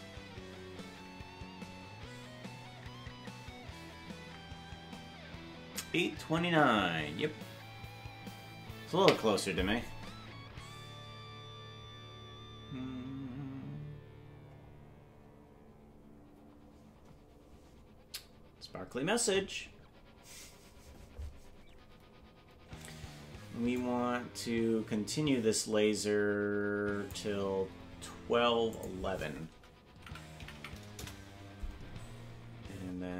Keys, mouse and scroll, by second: 24.0-27.2 drag, 28.7-31.8 drag, 30.5 KP_1.